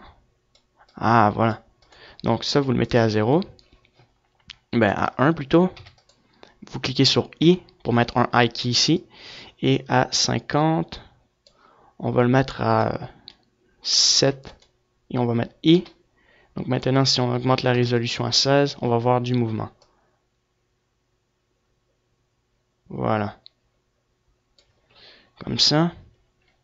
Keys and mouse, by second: 6.8-8.5 drag, 9.3 |, 10.8-12.5 drag, 14.4-16.3 drag, 19.2-20.4 drag, 22.4-24.2 drag.